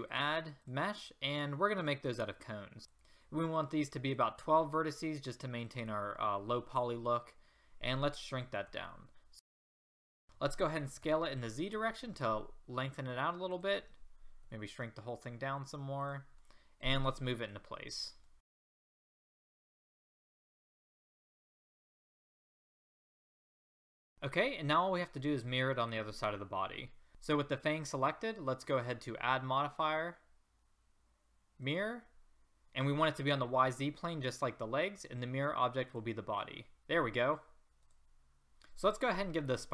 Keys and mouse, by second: 2.8 ctrl+z, 4.1-7.1 drag, 8.6 s, 11.0 s, 14.4 s, 18.0-18.5 drag, 18.7-21.8 typing, 19.1 click, 19.6 Escape, 19.7 Escape, 20.3 click, 20.7-21.0 drag, 21.3 ctrl+z, 21.6 click, 22.3-22.9 drag, 23.1 r, 23.5 click, 23.6 r, 23.9 click, 24.0 a, 27.1 a, 38.5 ctrl+z.